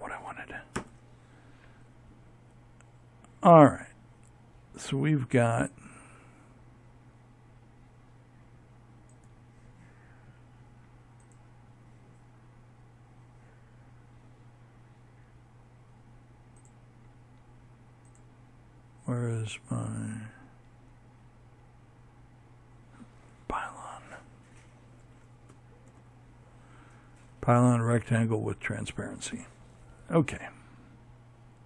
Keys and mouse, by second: 7.1-14.6 right drag, 14.6-26.6 drag.